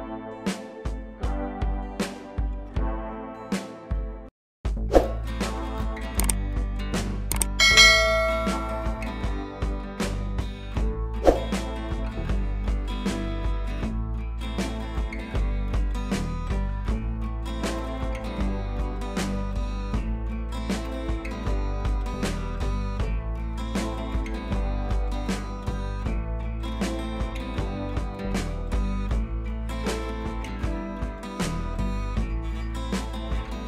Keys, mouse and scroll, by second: 0.8-2.6 drag, 7.1-9.0 drag, 22.1-24.1 drag, 32.3-32.8 drag.